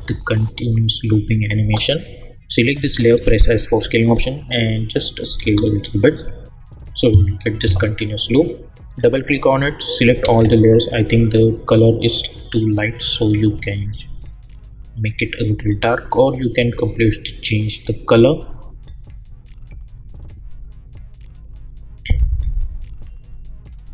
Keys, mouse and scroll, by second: 1.6 space, 2.5 click, 3.1 s, 3.6-5.4 drag, 5.4 space, 7.6 space, 8.9 click, 10.2 ctrl+a, 11.9-23.9 drag.